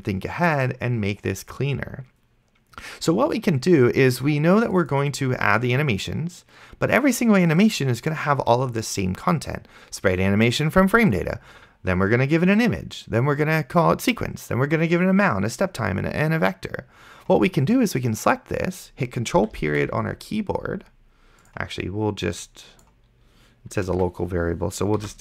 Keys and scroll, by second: 20.0 ctrl+., 24.2 ctrl+c.